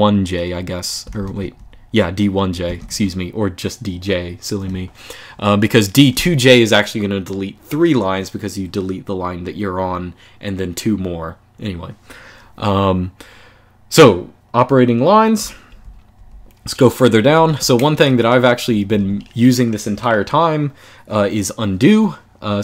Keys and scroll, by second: 0.7-2.6 typing, 2.5 Escape, 15.1-18.6 typing.